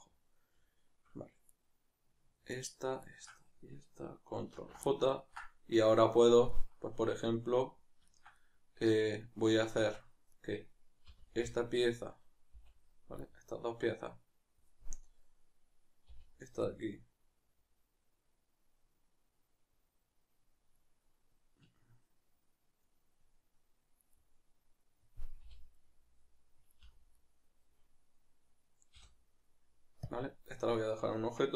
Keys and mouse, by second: 2.5-3.1 shift+right drag, 4.5 ctrl+j, 4.9-10.3 middle drag, 9.8 Tab, 10.3 right click, 11.1 l, 13.3-29.0 middle drag, 16.1 l, 25.4 l, 26.8 l, 29.0 p, 30.5-31.1 middle drag, 31.1 Tab, 31.3-31.5 middle drag.